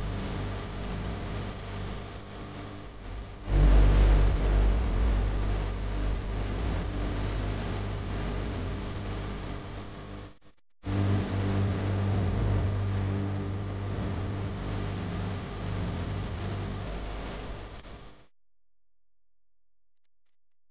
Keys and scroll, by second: 4.6 -.